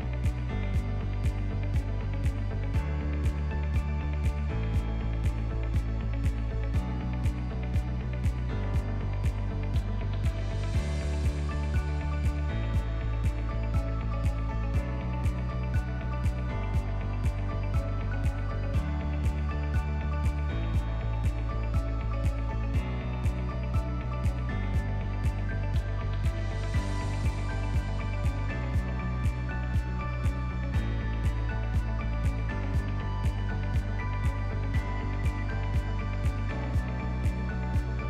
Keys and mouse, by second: 0.5 click, 1.5-2.9 right drag, 3.7 ctrl+z, 4.1-5.3 right drag, 5.3 s, 7.8 click, 8.3 ctrl+s, 9.0 shift+middle click, 10.0 shift+middle click, 10.5 ctrl+middle click, 10.9 shift+middle drag, 11.4 middle drag, 12.3 KP_1, 13.1 ctrl+middle drag, 13.4 shift+middle drag, 13.8 ctrl+middle click, 14.3 shift+a, 18.1 g, 19.7 click, 20.5 s, 21.3 g, 22.9 s, 24.3-24.7 drag, 24.9 click, 25.4-26.0 drag, 26.0 ctrl+click, 26.3 Tab, 27.1 ctrl+r, 29.3 click, 30.3 click, 32.1 shift+middle click, 32.4 ctrl+middle click, 33.0 shift+middle click, 35.8 ctrl+b.